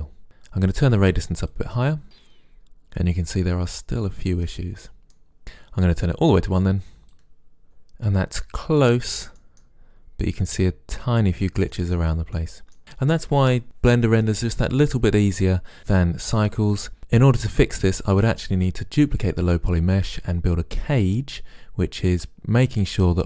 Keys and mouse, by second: 1.6-3.2 drag, 3.2-3.8 middle drag, 3.8-5.4 drag, 7.2 click, 9.6-10.7 drag.